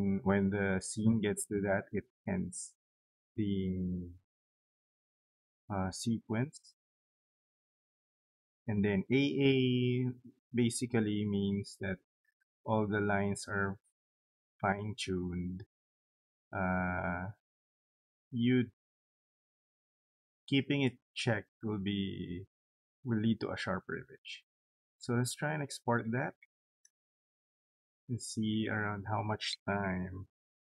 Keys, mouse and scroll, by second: 23.7 click, 26.4 click.